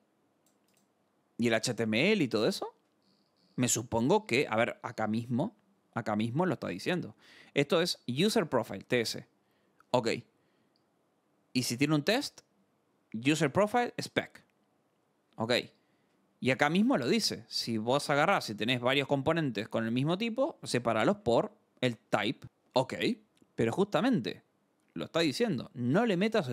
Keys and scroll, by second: 3.0 scroll, 10.7 scroll, 15.6 scroll, 17.1 scroll.